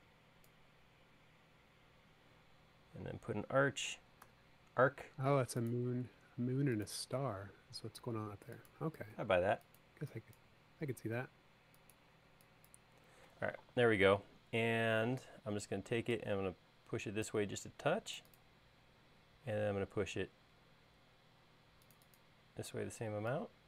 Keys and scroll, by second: 4.4 a, 9.2 e, 15.3 p.